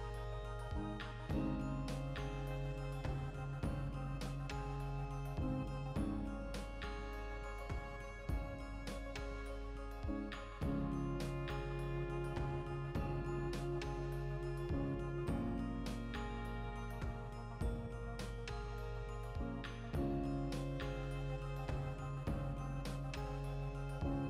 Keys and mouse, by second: 6.9 shift+middle click, 11.9 x, 13.0-18.1 shift+middle drag, 13.8 Tab, 18.1 right click, 18.3 Tab, 18.5-20.1 middle drag, 18.7 a, 19.5 ctrl+r, 20.1 right click, 20.3-22.1 middle drag, 21.3 ctrl+b, 22.1 shift+click, 22.2-23.9 middle drag, 23.2 ctrl+r, 23.9 click, 24.1 ctrl+r.